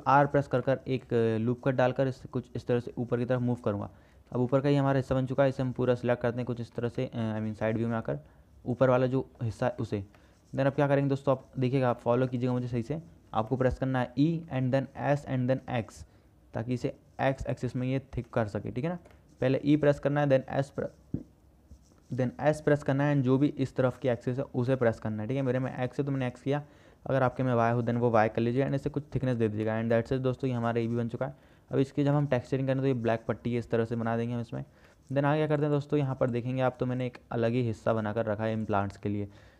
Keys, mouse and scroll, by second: 0.7 ctrl+r, 4.5 alt+z, 6.2 click, 7.3 click, 8.3 click, 9.2 click, 9.8 alt+z, 10.4 click, 12.1 click, 13.7 middle click, 14.8 e, 18.5 middle click, 19.5-21.2 middle drag, 23.1 click, 25.1 click, 26.9 click, 28.7 s, 29.8 Tab, 30.2-30.7 drag, 32.3 KP_0, 35.1 shift+click.